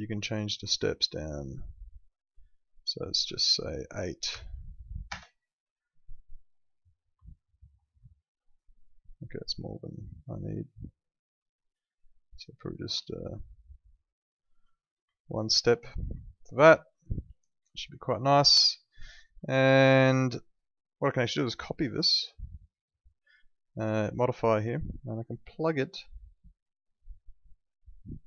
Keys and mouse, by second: 4.3 8, 5.0 Return, 5.2 Up, 7.3 alt+middle click, 8.1 alt+middle click, 10.1 click, 13.1 alt+middle click, 15.1 alt+middle click, 16.4 alt+middle click, 18.1 alt+middle click, 19.4 alt+middle click, 21.3 right click, 22.6 click, 25.7 click, 26.8 right click.